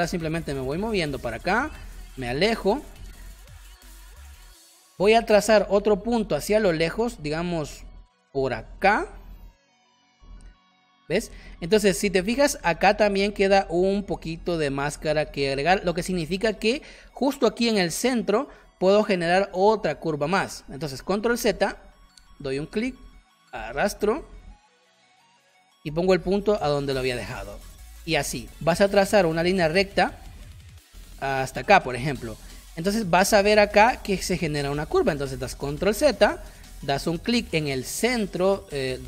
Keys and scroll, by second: 2.3 space, 7.0 space, 11.5 space, 20.9 ctrl+z, 21.3 space, 27.9 space, 35.8 ctrl+z.